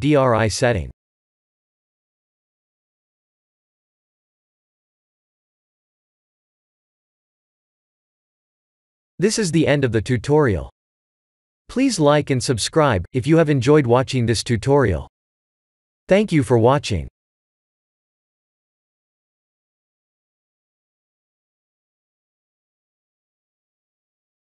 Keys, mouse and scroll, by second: 5.2 click, 5.8 ctrl+s.